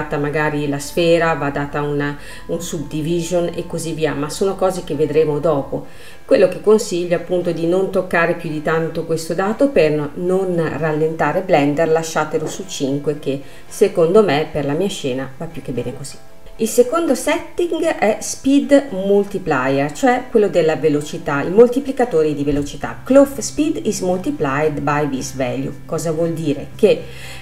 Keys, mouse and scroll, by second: 2.3-4.9 middle drag, 4.9-5.9 drag, 5.9-6.6 scroll down 1, 6.6-8.6 middle drag, 8.6-11.6 drag, 12.5 space, 14.1 middle click, 14.7 scroll up 2, 15.1 space, 16.4-19.1 drag.